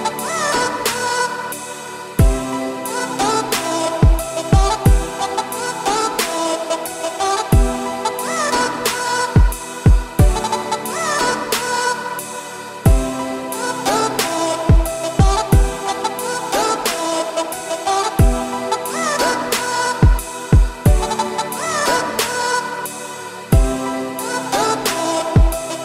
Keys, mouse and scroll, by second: 0.4 click, 1.9 g, 3.0 scroll down 2, 3.2 middle click, 4.1 Tab, 4.8 z, 5.1 scroll up 2, 5.3 middle drag, 5.6 Tab, 5.8 click, 6.3 alt+click, 6.6 scroll down 3, 6.7 middle click, 7.6 shift+d, 8.9 p, 9.6 Tab, 9.9 click, 10.5 scroll up 2, 10.6 Tab, 10.9 a, 11.7 f, 12.6 z, 13.4 e, 14.7 z, 15.0 middle click, 15.4 a, 16.4 shift+n, 16.7 Tab, 17.3 shift+click, 18.4 ctrl+KP_Subtract, 19.5 click, 20.7 alt+x, 22.4-22.7 scroll up 2, 22.7 middle click, 23.0 scroll up 1, 23.2-23.8 shift+middle drag, 23.8-25.3 right drag, 25.3 click.